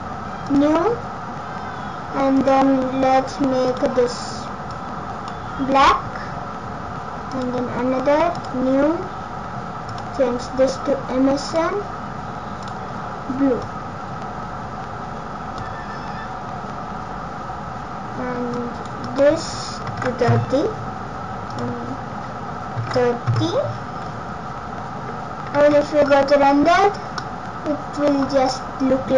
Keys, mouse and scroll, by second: 0.5 click, 3.7 click, 7.3 click, 8.3 click, 10.0 click, 12.6 click, 18.5 click, 21.5 click, 25.5 z, 27.2 middle click.